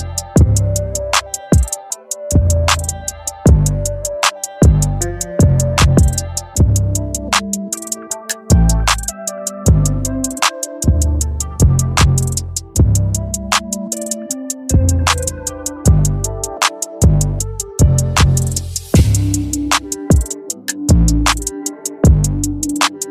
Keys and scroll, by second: 4.9 ], 18.8 Return.